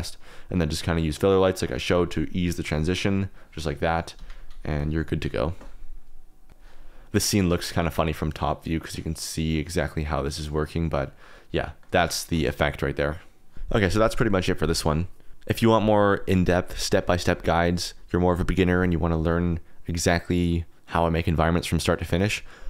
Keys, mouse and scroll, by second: 0.4 click, 0.7 middle click, 1.2 middle click, 1.4-1.8 scroll up 1, 1.8 g, 4.1 Escape, 7.6-9.5 shift+drag, 11.5 click, 12.8 drag.